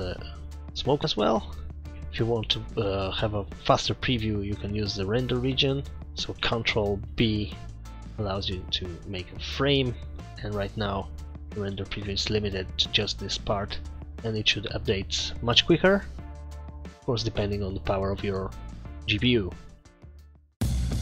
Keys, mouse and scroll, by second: 2.1 scroll down 10, 5.9 click, 7.2 ctrl+b.